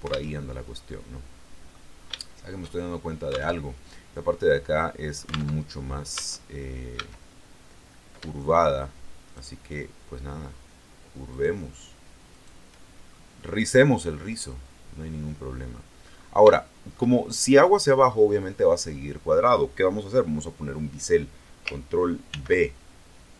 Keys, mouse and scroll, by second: 0.3 alt+Tab, 0.9 middle click, 2.1-3.5 shift+middle drag, 3.5 alt+Tab, 5.5 alt+Tab, 6.1 Tab, 6.9 a, 9.1 shift+right click, 11.2 shift+right click, 12.2 shift+middle click, 13.0 shift+scroll down 1, 13.3-15.8 middle drag, 15.8-16.4 scroll up 1, 16.4 shift+middle click, 22.2 ctrl+b.